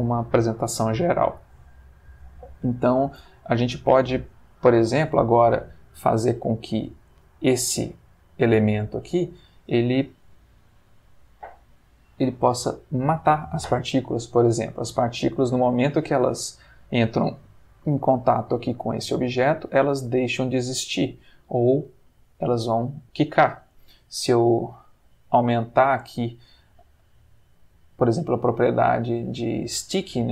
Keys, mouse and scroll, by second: 6.9 click, 7.7 g, 8.9 Escape, 12.8 click, 14.7-15.9 middle drag, 16.3-16.9 middle drag, 17.9-18.9 middle drag, 20.0-20.7 middle drag, 21.8 click, 27.2-28.9 drag.